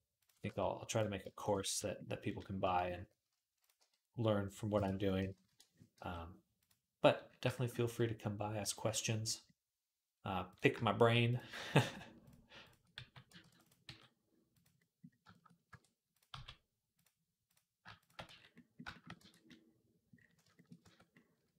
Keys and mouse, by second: 0.3 f, 1.1 alt+shift+click, 1.4 f, 3.6 g, 5.0 ., 5.7 g, 10.3 click, 10.4 shift+middle click, 11.1 click, 11.2 shift+middle click, 11.5 shift+click, 11.6 shift+middle click, 12.0 shift+click, 12.1 shift+middle click, 12.4 shift+click, 12.5-21.5 shift+middle drag, 12.8 f, 13.2 ctrl+r, 13.6 g, 15.0 shift+click, 15.5 r, 16.1 g, 17.6 shift+click, 18.1 f, 19.0 Tab, 20.6 Tab.